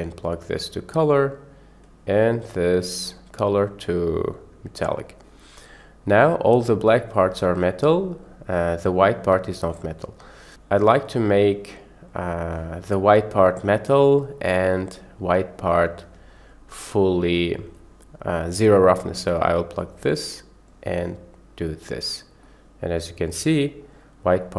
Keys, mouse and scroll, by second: 1.8 click, 2.1-5.2 drag, 6.2-6.8 middle drag, 7.4 middle click, 8.0-8.5 middle drag, 9.1-9.6 middle drag, 11.0 click, 12.3 click, 16.6 click, 17.8 click, 18.0-20.0 drag, 20.7-21.8 drag, 22.4-23.9 middle drag, 24.4 middle click.